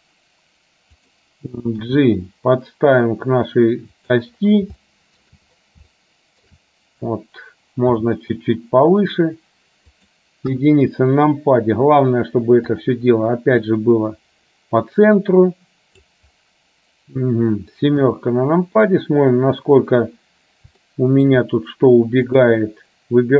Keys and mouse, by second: 2.0 g, 5.0 shift+middle click, 6.1 shift+middle click, 8.0 g, 10.6 KP_1, 12.9 click, 13.8-16.3 drag, 18.1 KP_7, 21.0 shift+middle click.